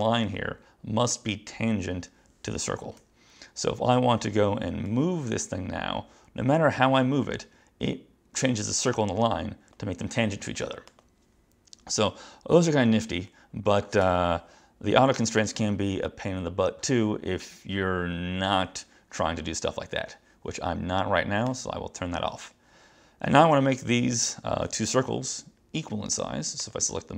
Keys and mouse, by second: 3.1 Escape, 5.0 click, 11.0 click, 14.1 BackSpace, 21.5 click, 24.7 click, 26.6 click.